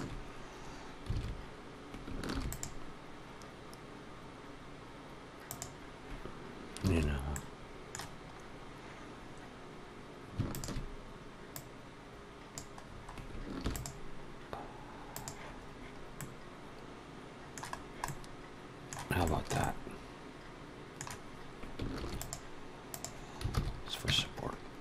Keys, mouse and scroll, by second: 1.0 alt+a, 2.2 ctrl+r, 6.8 alt+a, 7.2 middle click, 8.2-9.0 scroll up 1, 9.0 scroll down 1, 9.0-9.8 scroll down 1, 10.3 alt+shift+click, 11.4 click, 12.7-13.2 scroll down 5, 13.3 ctrl+r, 16.0 middle click, 17.6 scroll down 1, 17.9 middle click, 19.1 shift+middle click, 19.5 middle click, 21.8 ctrl+r, 23.4 alt+a, 23.9 Tab, 24.4-24.8 scroll down 2.